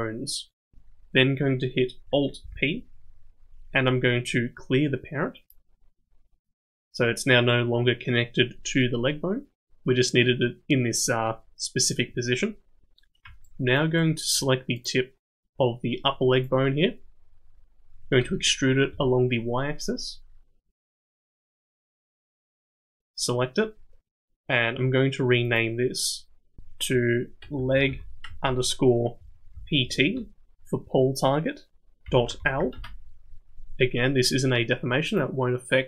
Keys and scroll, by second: 2.4 alt+p, 18.2 e.